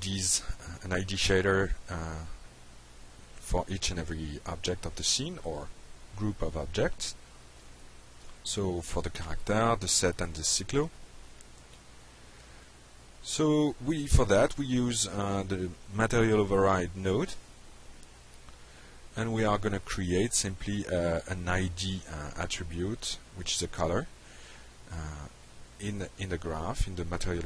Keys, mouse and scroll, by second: 0.1 click, 0.7 shift+click, 1.2 shift+click, 3.3-4.4 drag, 4.7 click, 5.0-5.5 drag, 5.9-6.3 drag, 6.6 click, 7.2 click, 7.8-8.9 drag, 9.2-9.5 drag, 9.8-10.1 drag, 10.5-11.1 drag, 11.4 click, 11.8 click, 12.4 click, 13.4 ctrl+space, 14.7-15.8 typing, 16.3 Down, 16.5 Up, 16.9 Return, 17.7-18.7 drag, 22.0 click, 23.0 shift+i, 23.2 d, 23.4 Return, 24.7 click, 25.9 click, 26.7 click.